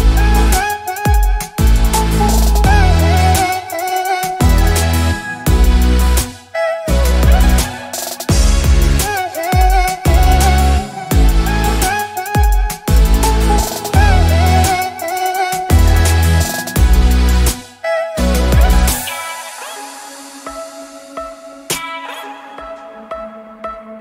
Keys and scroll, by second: 2.1 alt+space, 10.3 alt+BackSpace, 11.1 ctrl+BackSpace, 22.8 ctrl+d.